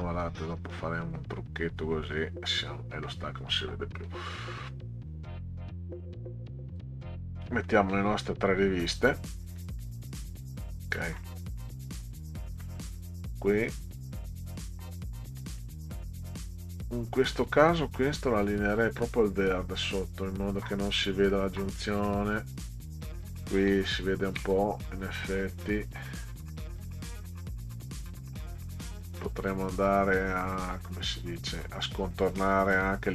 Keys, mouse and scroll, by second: 0.2-2.5 drag, 4.1-6.7 drag, 7.7 middle click, 9.6 middle click, 11.0 middle click, 12.6-15.3 middle drag, 16.9 click, 17.5-19.1 drag, 20.9 click, 21.8 middle click, 30.3 click, 30.9-32.7 drag.